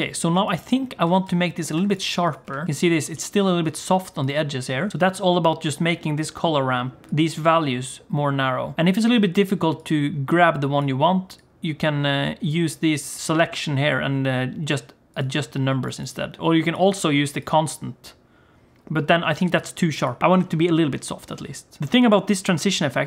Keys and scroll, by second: 1.0 g, 2.4 g.